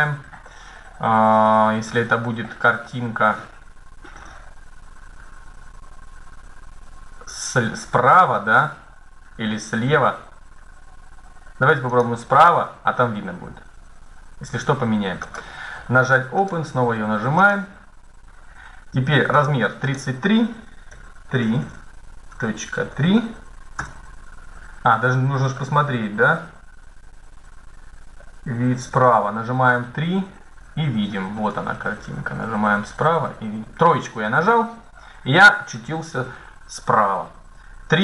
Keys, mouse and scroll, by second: 14.9 click, 17.2-21.3 drag, 24.7 middle click, 25.7-27.0 middle drag, 28.2-30.7 middle drag, 28.7 KP_3, 30.8 middle click, 34.6-36.3 middle drag, 37.8-38.0 drag.